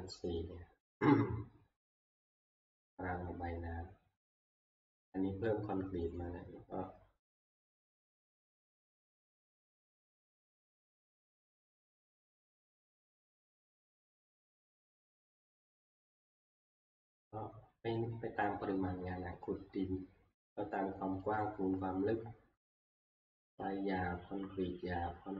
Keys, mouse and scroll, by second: 2.8 scroll, 6.2 click, 7.8 click, 8.6 click, 9.6 click, 14.5 click, 15.3 scroll down 3, 16.6 scroll down 1, 19.8 click, 19.8 scroll, 21.4 click, 21.4 scroll.